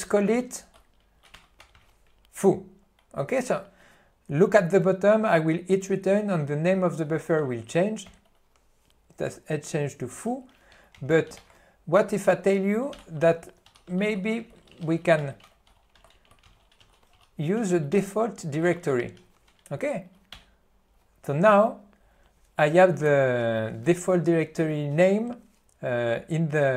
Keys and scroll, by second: 1.4 ., 8.8 Return, 11.1 alt+:, 12.9-14.2 typing, 20.5 Return.